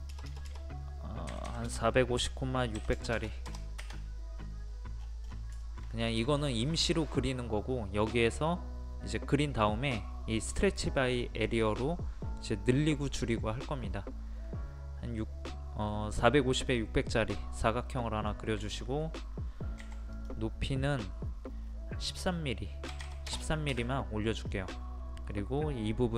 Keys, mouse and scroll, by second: 0.1 BackSpace, 1.3 KP_4, 4.4-5.0 scroll up 1, 5.0-5.5 scroll down 1, 5.6 shift+middle click, 6.1 click, 6.7 middle click, 17.2-18.0 scroll up 1, 18.0 middle click, 18.7 shift+middle click, 19.8 p, 20.1 click, 22.9 KP_1, 24.2 middle click, 24.8-26.1 scroll up 1.